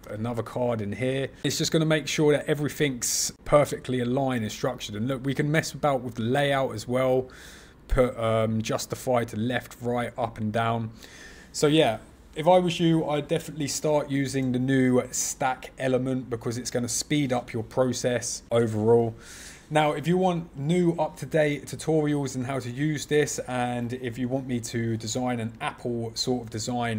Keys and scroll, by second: 4.3 super+z, 18.5 ctrl+f.